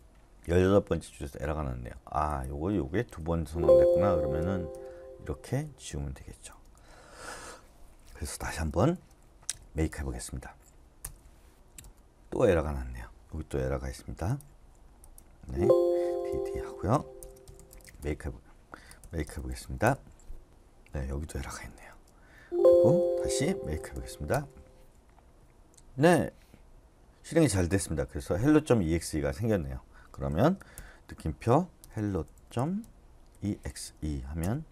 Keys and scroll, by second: 3.4 Escape, 4.4-4.7 typing, 5.9-6.7 typing, 8.5-9.9 typing, 11.0 Return, 15.4 Escape, 16.0 typing, 17.7-19.6 typing, 18.0 Return, 19.8 Return, 20.5 Return, 21.6 d, 21.9 d, 22.3 Escape, 23.7 typing, 24.3 Return, 30.7-33.6 typing.